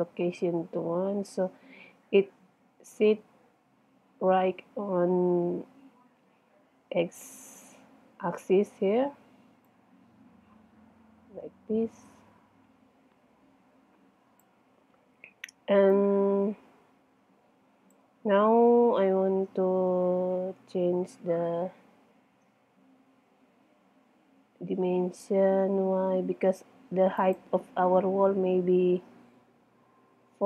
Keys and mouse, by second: 2.1-5.9 middle drag, 6.1-8.0 middle drag, 9.7 click, 9.9 middle click, 10.1 click, 10.4 click, 16.0-17.5 middle drag, 20.0 KP_1, 21.1 middle click, 27.3-29.4 drag.